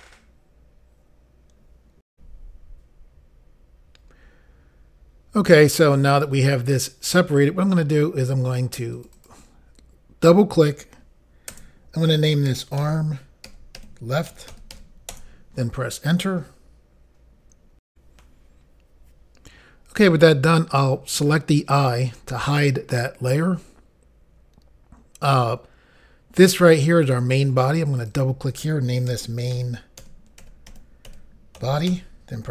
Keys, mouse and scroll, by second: 2.1 Insert, 2.1 Pause, 8.9 click, 9.1 click, 11.5 BackSpace, 12.5-15.6 typing, 17.9 Insert, 21.9 click, 27.0 click, 27.9 click, 28.1 click, 29.1-29.5 typing, 31.3-32.5 typing.